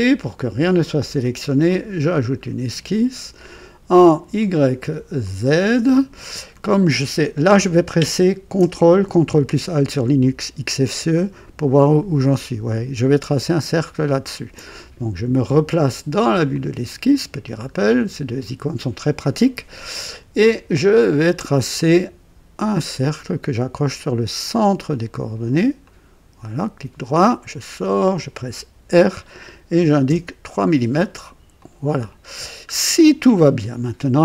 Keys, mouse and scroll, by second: 1.6 click, 4.3 click, 5.2 click, 6.2 scroll up 2, 11.1-13.3 ctrl+alt+drag, 13.9 ctrl+alt+click, 16.4 click, 17.3-17.6 scroll up 1, 17.8-18.3 right drag, 20.9 click, 24.8 click, 25.8 click, 26.4 right click, 27.7 click, 28.8 r, 29.7 KP_3, 30.0 KP_Enter, 31.5 click, 32.3-32.6 scroll down 1.